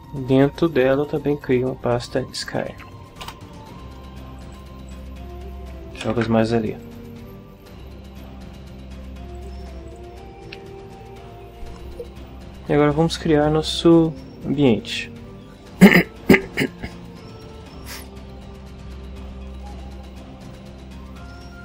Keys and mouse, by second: 1.4 click, 2.2-3.3 typing, 4.4 click, 4.9 click, 6.1 ctrl+v, 6.8 click, 9.3 click, 9.9 click.